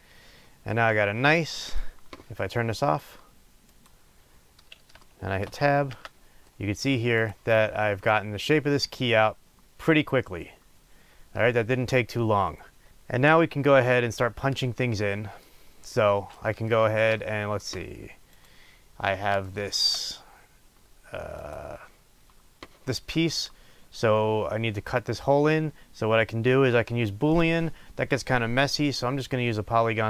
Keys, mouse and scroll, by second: 1.6-3.8 middle drag, 5.0 shift+middle drag, 5.8 Tab, 6.5-7.2 middle drag, 7.2 click, 7.5-18.3 middle drag, 18.3 click, 19.4-21.4 shift+middle drag, 21.4 click.